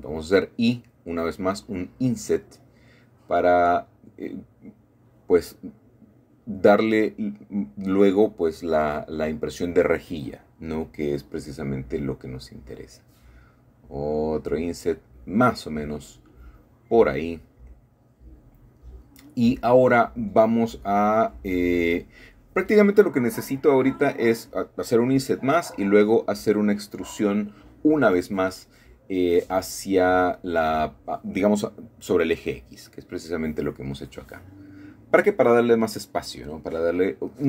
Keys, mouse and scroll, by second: 1.1 Escape, 1.7 ctrl+z, 3.3 ctrl+z, 4.2 ctrl+shift+z, 5.5 c, 6.1-9.1 middle drag, 9.0 click, 9.1 Escape, 10.1 i, 14.4 typing, 15.2-16.4 middle drag, 17.1-19.0 shift+middle drag, 17.7-18.6 scroll down 1, 19.0 typing, 22.9 typing, 27.2 shift+click, 28.0 shift+middle click, 28.2 click, 28.5 e, 28.6 e, 29.0 middle click, 29.6 middle click, 30.0-30.3 scroll down 1, 30.3-30.7 scroll up 1, 30.7-31.7 middle drag, 31.7-32.9 scroll down 1, 32.5 middle click, 33.9-34.7 scroll up 2, 34.7 shift+middle click, 36.4 click, 37.1 e.